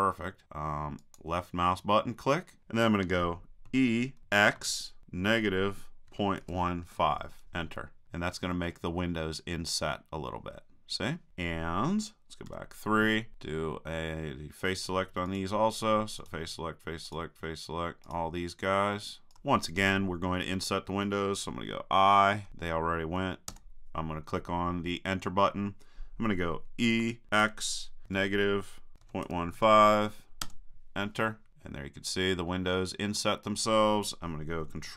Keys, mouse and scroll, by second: 1.2-2.6 drag, 3.7 e, 8.0 middle click, 9.5-11.3 middle drag, 12.5 KP_3, 15.3-20.4 right drag, 22.4 i, 27.0 e, 31.5 middle click, 32.8-34.6 middle drag.